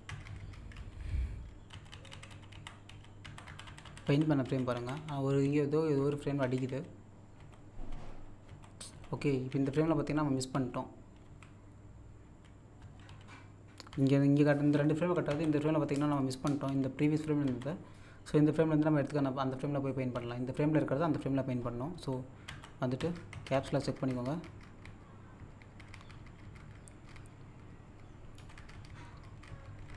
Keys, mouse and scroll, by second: 0.7-1.7 scroll down 1, 1.5-4.6 typing, 6.0-11.2 typing, 12.2-12.8 scroll up 1, 12.8-15.3 typing, 16.7-17.5 typing, 20.1 typing, 22.5 z, 28.4 Down.